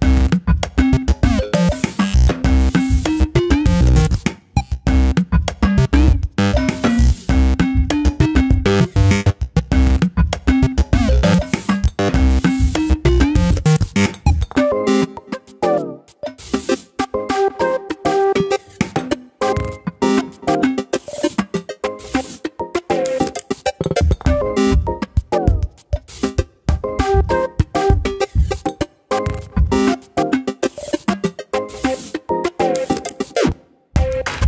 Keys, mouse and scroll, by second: 0.2 Tab, 0.4 click, 1.0 Tab, 5.1 scroll up 1, 5.3 s, 7.6 ctrl+b, 9.3 alt+/, 9.4 scroll down 2, 9.6 middle click, 10.4 alt+/, 10.5 scroll up 2, 10.7 middle click, 11.2 click, 11.5 click, 11.7 middle click, 12.4 click, 12.7 middle click, 13.2-14.9 typing, 15.1 alt+/, 15.5 scroll down 1, 15.7 middle click, 16.3 scroll down 3, 16.5 middle click, 17.3 click, 17.4-17.7 scroll up 4, 17.7 click, 18.1 Tab, 18.9 Tab, 19.1 click, 19.3 l, 19.6 alt+/, 19.7 scroll up 1, 19.9 middle click, 20.7 KP_7, 21.3 s, 22.7 click, 25.0-26.0 scroll up 1, 26.0 scroll down 2, 26.2 shift+middle click, 26.7 scroll down 2, 26.9 shift+middle click, 27.4 l, 27.9 shift+d, 29.2 click, 30.1 shift+middle click, 30.3-30.6 scroll up 2, 30.6 r, 31.9 click, 33.4 alt+/, 33.5 scroll down 4, 33.7 middle click.